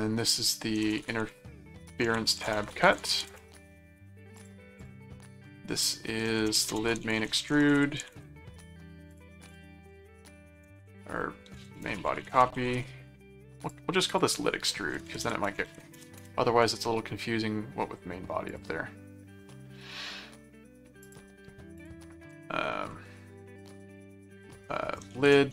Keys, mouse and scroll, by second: 0.8-3.7 typing, 4.4 click, 6.2-8.6 typing, 9.1 click, 10.6-13.0 typing, 13.6 click, 15.9 shift+BackSpace, 16.2 Return, 18.5 click, 21.0 click, 21.8 click, 23.5-25.5 typing.